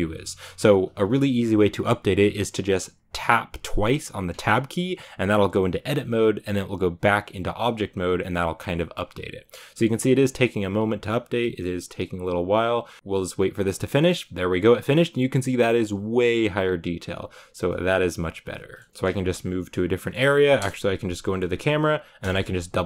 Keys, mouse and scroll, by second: 4.5 Tab, 4.8 Tab, 17.2-17.6 scroll down 1, 17.6-18.7 middle drag, 18.8 shift+middle click, 19.6 scroll up 2, 19.9 middle click, 20.6 KP_0, 21.1 shift+middle drag, 21.4-22.1 scroll up 1, 22.4 Tab, 22.7 Tab.